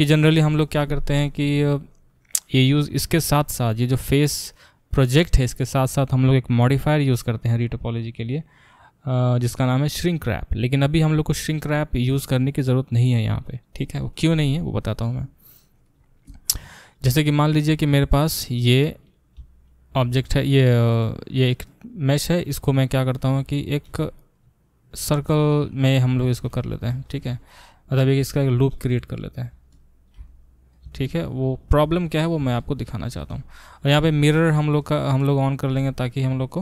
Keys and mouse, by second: 1.5 click, 1.6-6.3 middle drag, 6.3-17.6 drag, 17.6 shift+middle click, 17.9 shift+click, 18.0-21.0 shift+middle drag, 19.4 e, 21.0-24.0 drag, 24.0 middle click, 24.3 click, 24.4-25.9 middle drag, 24.9 r, 25.9 click, 26.1 shift+middle click, 27.0 shift+click, 27.1-36.6 shift+middle drag, 27.3 r, 29.0 e, 30.2 e, 33.3 e.